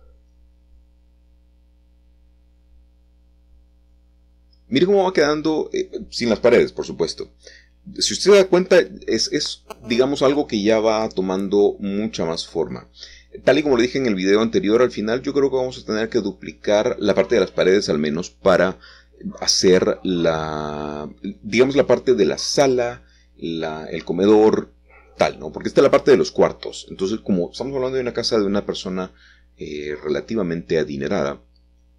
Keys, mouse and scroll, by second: 0.1 middle click, 2.4 middle click, 2.4 KP_1, 4.2 3, 5.1-6.2 scroll down 1, 6.2 middle click, 7.5 scroll up 2, 7.6-8.9 scroll down 4, 8.5 middle click, 8.8 middle click, 9.3 middle click, 9.4 middle click, 9.8 middle click, 10.0 middle click, 12.0 ctrl+middle click, 19.2 a, 19.4 a, 21.3-22.0 scroll down 2, 23.5-23.9 scroll up 2, 23.9-24.7 scroll down 1, 25.4-26.1 scroll up 1, 26.4 shift+scroll up 1, 26.4-28.8 shift+middle drag, 31.0 click.